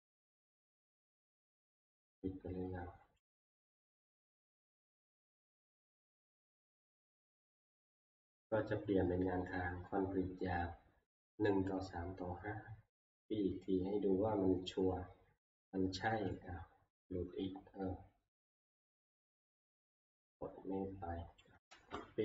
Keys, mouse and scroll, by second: 0.1 click, 3.3 click, 4.1 click, 4.7 click, 6.2 click, 7.4 click, 14.1 click, 15.5 click, 15.7 click, 16.2 click, 18.4 click, 21.4 click, 21.7 ctrl+c.